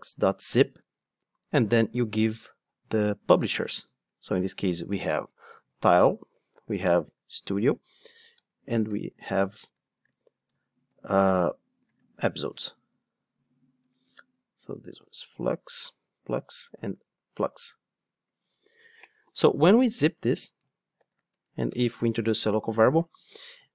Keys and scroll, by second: 0.1 Return, 11.1 Escape, 13.8 Return, 21.3 alt+Return.